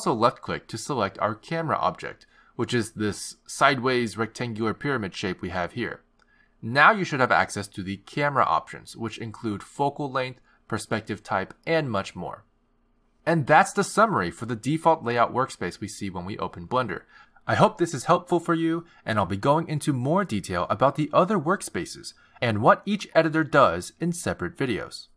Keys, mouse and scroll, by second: 2.6 click.